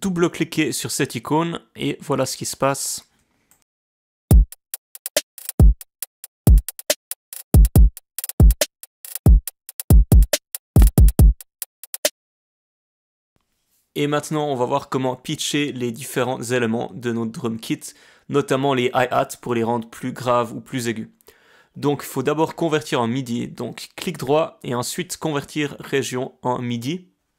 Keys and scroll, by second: 4.2 space, 12.0 space, 12.7 space.